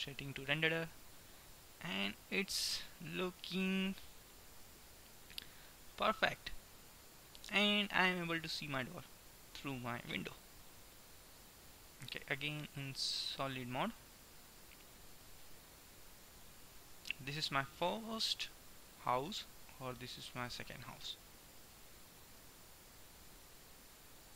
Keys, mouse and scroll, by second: 1.3 middle click, 12.5-16.3 drag, 16.3 KP_1, 20.6-22.3 drag, 22.5-24.3 drag.